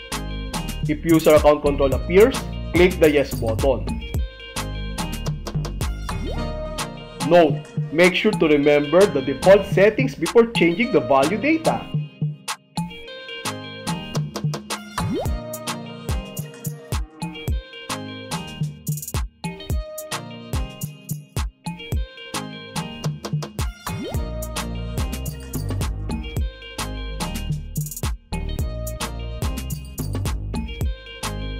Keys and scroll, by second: 4.0 Left, 5.5 space, 13.4 h, 14.6 h, 15.6 h, 17.6 Right, 19.4 s, 20.9 s, 22.5 s, 24.5 Right, 26.4 m, 27.9 m, 29.7 Right.